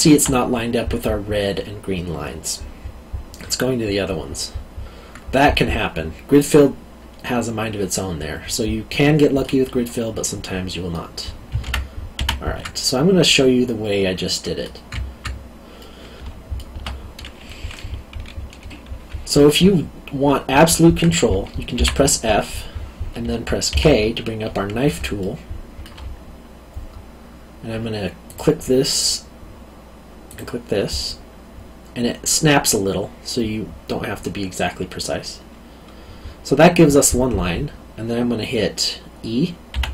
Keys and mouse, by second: 7.2 middle click, 10.2 middle click, 11.6 ctrl+z, 12.7 middle click, 15.8 middle click, 21.7 f, 23.7 k, 25.2 alt+middle click, 28.2 click, 39.7 e.